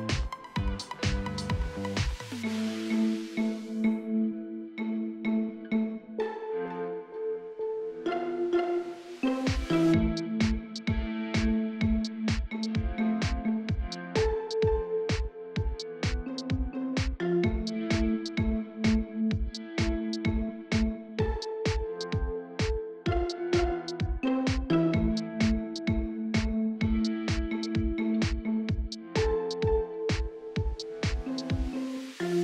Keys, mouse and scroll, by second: 0.3 click, 0.7-1.8 right drag, 2.8 click, 3.4-4.5 right drag, 4.5 click, 5.0-6.0 right drag, 6.0-7.3 drag, 7.3 middle click, 7.7 right click, 8.5 click, 9.3 right click, 9.6 middle click, 10.2 right click, 10.5 middle click, 11.3 right click, 11.9 click, 12.8 middle click, 13.3 right click, 14.3-15.4 drag, 15.4 middle click, 15.8 right click, 16.3-17.4 middle drag, 17.4 right click, 18.2-19.5 drag, 19.5 middle click, 20.3-23.2 ctrl+right drag, 23.2 click, 24.1 middle click, 24.6 right click, 25.3-26.4 drag, 26.4 middle click, 26.9 right click, 27.4-29.2 drag, 29.2 middle click, 29.9 right click, 30.4-31.5 drag, 31.8-32.4 shift+middle drag.